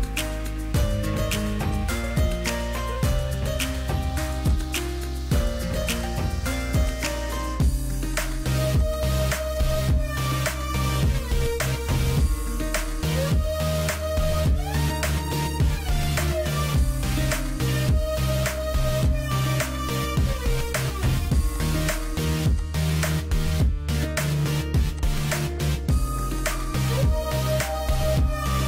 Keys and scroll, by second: 1.6 Escape, 2.3 ctrl+h, 5.1 p, 6.4 p, 8.4 Escape, 9.0 p, 13.6 Escape, 15.9 m, 21.4 Escape, 22.7 ctrl+h, 23.3 ctrl+h, 27.3 p.